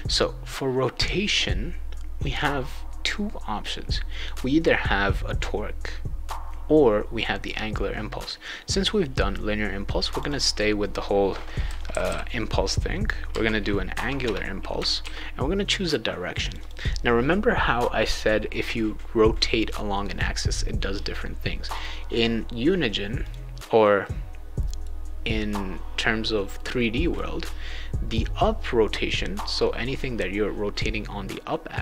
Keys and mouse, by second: 10.1 click, 10.3 click, 11.4-13.3 typing, 14.2 Return, 15.0 ctrl+s, 16.4 click, 16.6 click, 20.1 click, 21.7 click, 23.2 click, 24.0 right click, 26.5 right click.